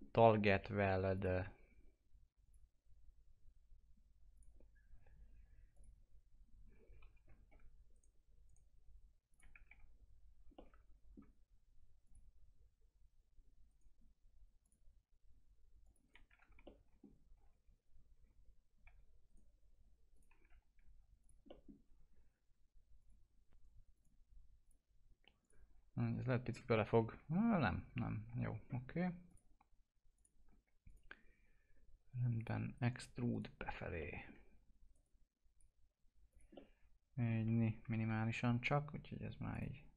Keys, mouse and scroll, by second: 0.0-0.9 scroll down 1, 1.1 click, 7.6 scroll up 1, 7.9 right click, 9.3 click, 9.6 F3, 10.5-12.0 middle drag, 12.0 click, 13.6 right click, 14.6 click, 16.0 right click, 16.3 F3, 16.6 middle click, 17.3 F3, 18.1 1, 19.2 right click, 20.1 click, 20.4 F3, 21.2 click, 21.4 middle click, 21.7-22.2 scroll down 1, 22.9 click, 26.0 F4, 26.4-26.7 scroll down 1, 26.8-28.3 alt+middle drag, 28.3 F4, 28.5-29.3 scroll up 1, 30.5 scroll up 1, 30.9 click, 33.3 right click, 34.0 middle click, 34.9 right click, 35.1 click, 36.6-38.1 alt+middle drag, 38.1 ctrl+z, 39.5 click.